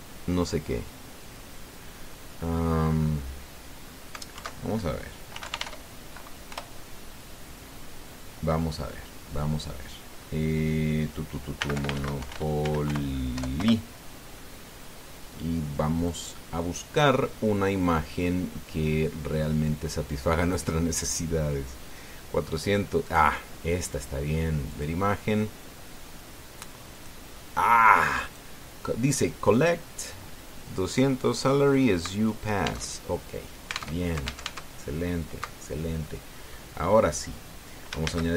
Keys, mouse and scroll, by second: 2.5-3.8 scroll down 4, 5.1 alt+F2, 6.1 f, 6.2 i, 6.4 e, 7.2 Return, 12.4-14.1 typing, 14.4 Return, 16.8 click, 23.8 click, 25.5 click, 27.7 click, 28.6 click, 33.6 alt+Tab, 34.8 alt+Tab.